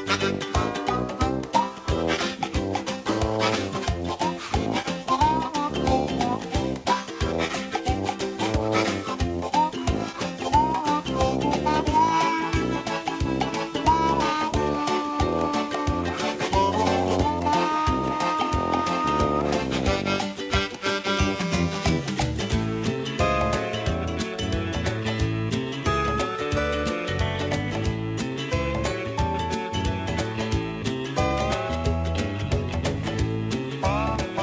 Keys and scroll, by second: 9.2 ctrl+d, 34.3 ctrl+d.